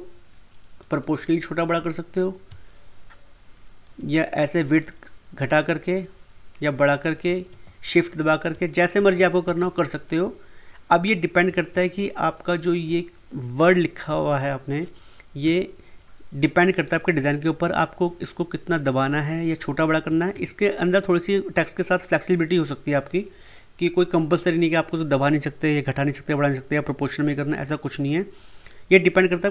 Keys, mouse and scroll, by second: 5.8-7.5 drag, 7.5 ctrl+z, 8.5 shift+click, 9.4 ctrl+z, 11.7 ctrl+z, 13.7-15.4 drag, 15.4 p, 18.7-20.3 drag, 20.3 ctrl+z.